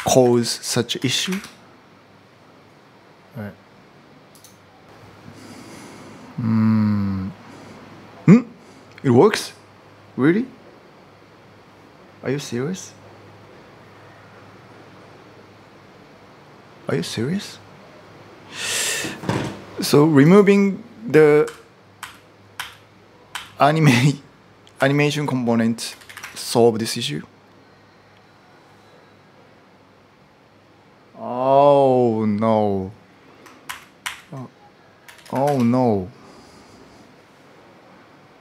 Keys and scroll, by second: 0.0-1.5 typing, 4.9 typing, 21.2-23.1 typing, 24.5-26.4 typing, 33.4 ctrl+r, 33.8 ctrl+r, 34.7-35.6 typing.